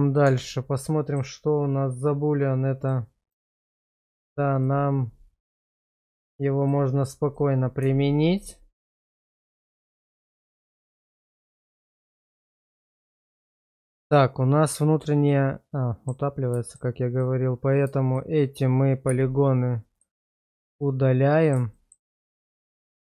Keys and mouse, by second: 0.2 Tab, 1.0 middle click, 2.8 click, 3.9 shift+middle click, 4.6-5.6 middle drag, 6.7 click, 8.1-8.5 shift+middle drag, 8.9-9.8 middle drag, 10.0 shift+middle click, 10.4 middle drag, 10.8 shift+middle drag, 11.2 Tab, 11.8 middle click, 13.0-16.1 middle drag, 16.6 shift+middle click, 19.1 x, 20.8 middle click, 21.8 shift+middle click, 22.2-23.1 middle drag.